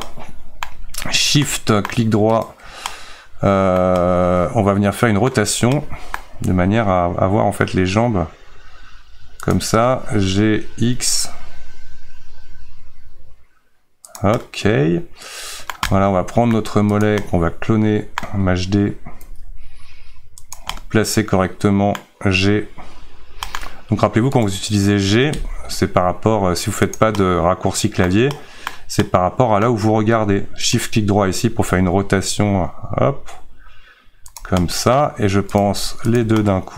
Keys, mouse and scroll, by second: 0.6-1.4 scroll down 1, 1.4 middle click, 2.3 shift+right click, 2.9-6.4 middle drag, 6.4 r, 14.4-17.0 middle drag, 17.0 click, 17.2-19.2 middle drag, 19.2 shift+d, 20.8-22.3 middle drag, 22.3 g, 27.2-30.7 middle drag, 30.7 shift+right click, 31.6 r, 34.6 middle click, 35.6 click, 36.4-36.7 middle drag.